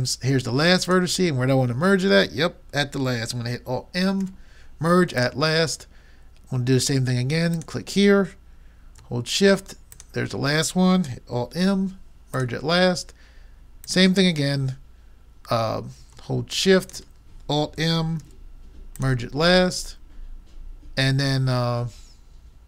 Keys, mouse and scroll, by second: 0.9-2.6 drag, 4.2 alt+m, 7.5-9.3 drag, 10.0-11.6 drag, 11.6 alt+m, 14.2 click, 14.7 click, 16.9-18.2 drag, 18.2 alt+m.